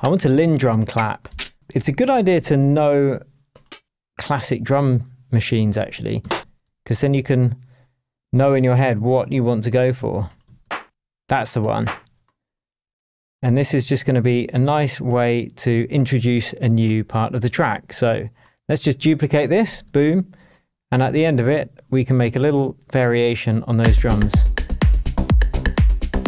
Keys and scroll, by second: 1.3 Up, 1.5-2.6 typing, 5.7 Right, 6.2 Down, 6.6 Up, 6.8 Left, 10.4 Right, 10.6 Down, 19.6 super+d.